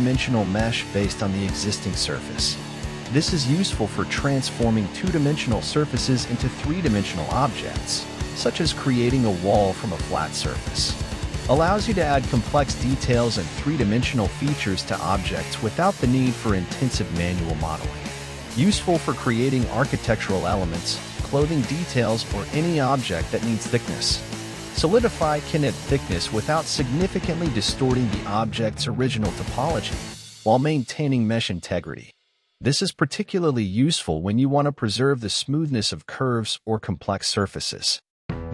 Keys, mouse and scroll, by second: 0.4 scroll up 3, 2.0 click, 8.9-11.4 scroll down 4, 13.0-14.4 scroll down 1, 14.4-15.3 scroll down 5, 15.3-16.4 middle drag, 16.4-17.5 scroll up 5, 17.5 click, 18.5-19.1 scroll up 1, 19.1 KP_1, 20.9-22.4 drag, 24.0-24.8 scroll up 5, 24.8 shift+middle click, 25.3-25.8 scroll up 3, 25.8 z, 26.2-26.6 scroll down 2, 26.6-30.0 middle drag, 30.5-31.3 scroll down 4, 31.3 z, 32.1-33.1 middle drag, 33.1-33.7 scroll up 4, 33.9-35.0 scroll up 1, 35.0-38.4 drag.